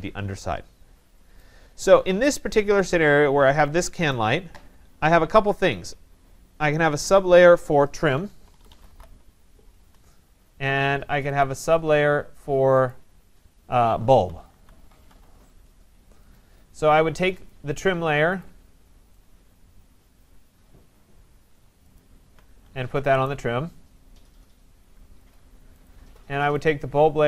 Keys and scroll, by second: 9.7 Return.